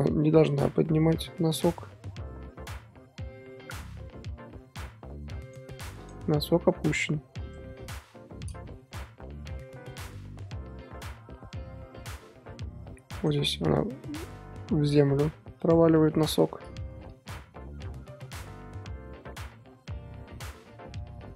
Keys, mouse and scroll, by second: 6.0 click, 6.3 r, 8.0 i, 9.0-12.0 drag, 13.7 r, 16.1 i, 17.1-21.3 drag.